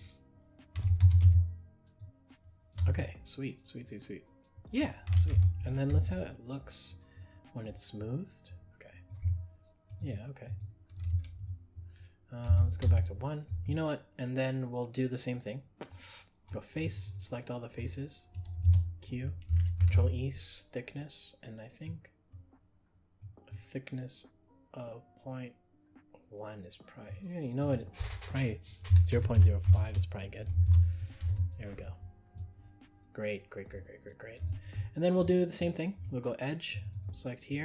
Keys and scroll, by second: 19.8 ctrl+e.